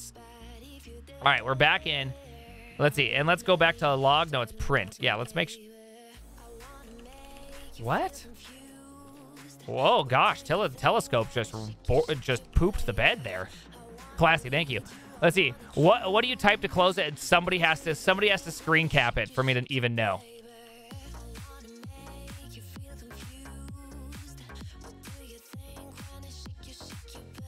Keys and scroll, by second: 0.0 alt+[, 0.5 alt+{, 1.3 alt+f, 2.1 ctrl+p, 3.3-5.0 typing, 14.5-15.2 typing, 19.6 ctrl+p, 19.8-20.8 typing.